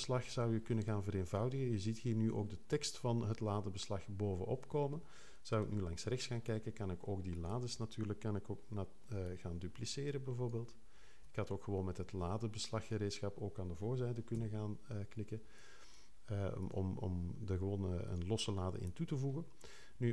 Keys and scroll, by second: 5.6 6, 14.3 3.